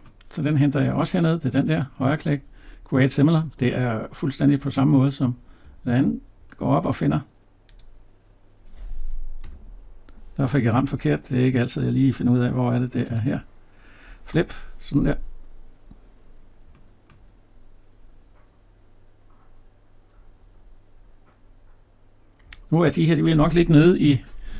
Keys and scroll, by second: 10.7 Escape.